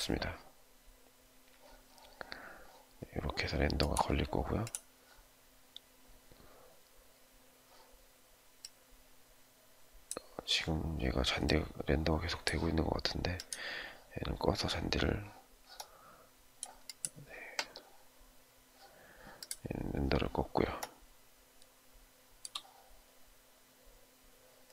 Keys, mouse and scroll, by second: 20.7 shift+middle click.